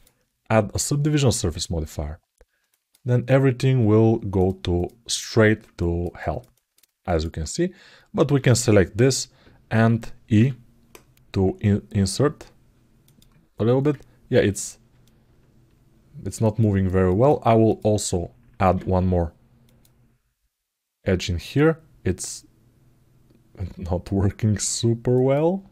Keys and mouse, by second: 2.5 ctrl+alt+middle click, 4.1 click, 4.9 click, 5.5 ctrl+alt+middle click, 5.9 alt+middle click, 6.3 ctrl+alt+middle click, 6.8 alt+middle click, 8.2 click, 14.3 click, 14.8-16.6 alt+middle drag, 16.8 alt+middle click, 17.5 click, 25.6 ctrl+alt+middle click.